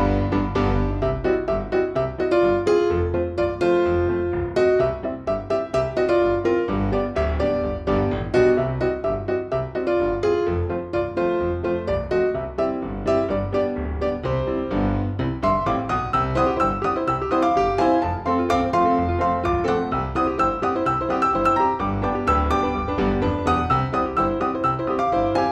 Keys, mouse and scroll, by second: 0.0 middle drag, 1.9 middle click, 2.0 s, 2.2 KP_3, 3.0 shift+d, 3.2 middle click, 3.5 middle click, 3.7 shift+d, 4.0 middle click, 4.1 shift+click, 4.2 middle click, 4.5 middle drag, 4.9 click, 5.0 middle click, 5.1 click, 5.2 click, 5.5 Tab, 5.7 Tab, 6.0 Tab, 6.1 click, 6.3 click, 6.8 middle click, 8.3 s, 9.0 click, 9.0 middle click, 9.3 click, 9.4 click, 9.5 middle click, 9.6 KP_3, 9.7 middle click, 9.9 KP_1, 10.8 middle click, 11.3 middle click, 12.1-12.5 scroll up 2, 12.8 click, 13.2 click, 13.5 scroll up 1, 13.6 scroll down 1, 13.6 middle click, 14.0 middle click, 14.6 click, 16.0 scroll down 2, 16.0-16.4 scroll up 3, 16.4 scroll down 1, 17.6 click, 18.0 click, 21.0 click, 22.5 scroll down 1, 23.2 middle click, 24.3 click.